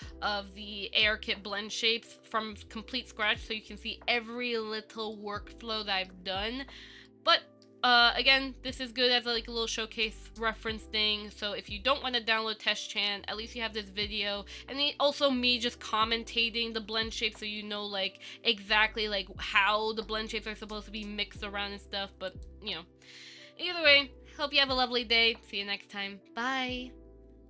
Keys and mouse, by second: 2.1-3.6 middle drag, 4.1 middle click, 5.4-6.4 shift+middle drag, 7.3 middle click, 8.2-8.6 ctrl+middle drag, 8.9-9.5 shift+middle drag, 9.6-12.2 middle drag, 12.6-13.1 shift+middle drag, 13.2 middle click, 16.6 shift+middle click, 18.5-20.4 ctrl+middle drag, 20.9-21.2 shift+middle drag, 22.5 click.